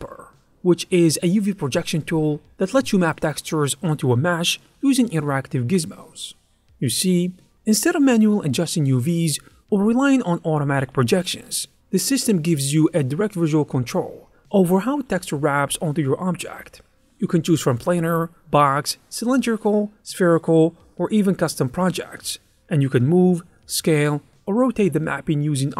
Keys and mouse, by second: 0.2 click, 2.5 click, 3.5 click, 6.9 click, 8.3 click, 8.8 ctrl+click, 9.2 middle click, 10.4 click, 10.9 click, 11.1 middle click, 11.5 middle click, 11.7 click, 11.8 middle click, 12.8 click, 13.1 ctrl+middle click, 13.4 ctrl+middle click, 14.9 click, 15.2 click, 15.9 click, 17.6 click, 18.4 shift+middle click, 18.7 shift+middle click, 19.0 shift+middle click, 19.9 click, 19.9 middle click, 20.5 Tab, 20.7 alt+a, 20.7 alt+middle click, 21.1 l, 21.1 middle click, 21.7 l, 22.8 Tab, 23.5 click, 23.9 click, 24.3 click, 25.0 click, 25.3 shift+middle click, 25.4 ctrl+middle click.